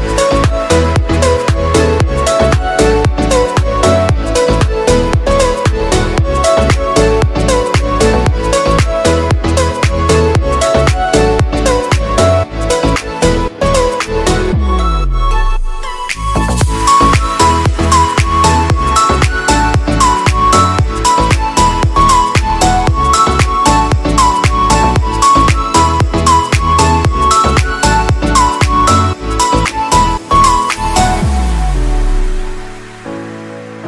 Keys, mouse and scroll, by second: 1.0 click, 2.7 scroll down 5, 3.7 click, 4.0-4.5 scroll down 3, 5.4 shift+a, 7.9 g, 9.2 s, 13.2 click, 14.0 0, 15.5 click, 16.0 scroll up 4, 17.7 scroll up 5, 21.5 scroll down 6, 22.3 middle click, 22.7-23.6 scroll down 5, 23.6 r, 24.9 g, 26.0 r, 26.9-28.5 middle drag, 28.5 r, 29.5 middle click, 30.3 KP_0, 31.1 scroll up 5, 32.1 click.